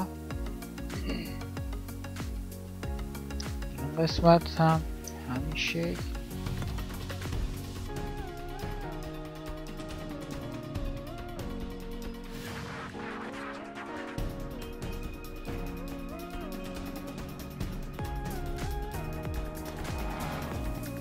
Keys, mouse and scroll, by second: 10.5 ctrl+z, 18.9 g, 19.5 g.